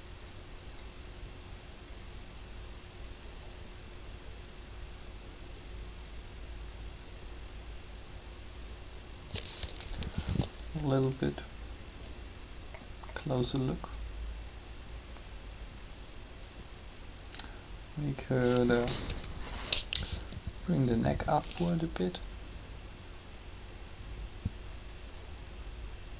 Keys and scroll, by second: 10.0 alt+a, 19.1 3.